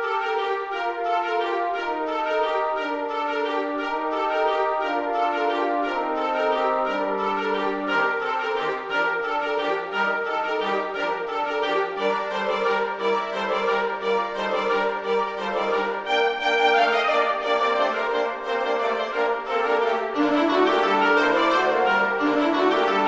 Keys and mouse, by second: 0.1 middle click, 0.6 s, 1.5 click, 1.7 g, 1.8 z, 2.3 click, 2.7 middle click, 3.7 g, 4.1 y, 4.4 click, 4.7 z, 6.1 click, 6.6 middle click, 7.4 s, 7.8 z, 8.3 click, 8.6 z, 9.3 click, 10.1 middle click, 11.2 shift+middle click, 12.4 middle click, 13.0 click, 14.3 shift+d, 14.6 x, 15.5 click, 15.8 s, 16.2 click, 16.4 s, 16.7 z, 17.5 click, 18.1 z, 18.3 click, 18.5 middle click, 20.6 g, 21.3 y, 22.3 g, 22.4 x.